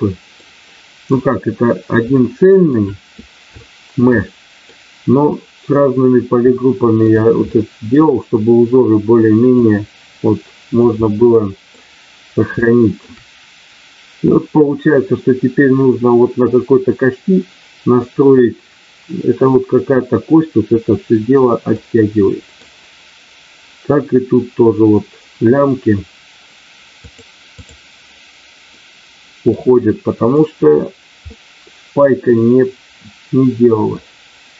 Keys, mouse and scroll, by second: 0.3 middle click, 2.1 shift+middle click, 3.6 shift+middle click, 4.1 middle click, 6.5 shift+middle click, 7.5 middle click, 9.6-10.9 drag, 12.6 shift+middle click, 21.7 middle click, 27.1 click, 28.7 middle click, 30.2 click, 31.2-34.0 middle drag.